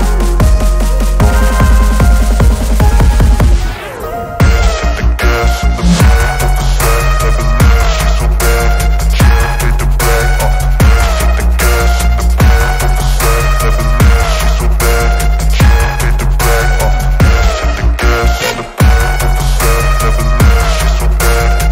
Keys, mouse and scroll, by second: 0.4 middle click, 1.9 shift+middle click, 2.3 middle click, 6.7 Delete, 8.4-10.1 drag, 11.5 s, 12.6-13.0 drag, 13.0 middle click, 15.1 alt+middle click, 16.2 shift+middle drag, 17.2 shift+middle click, 17.9 g, 18.1 z.